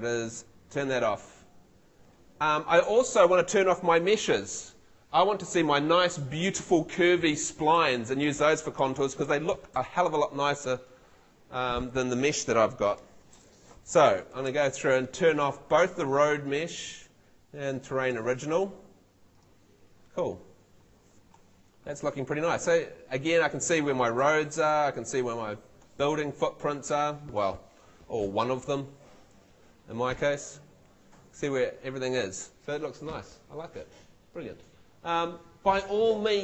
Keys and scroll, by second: 14.3 super+l.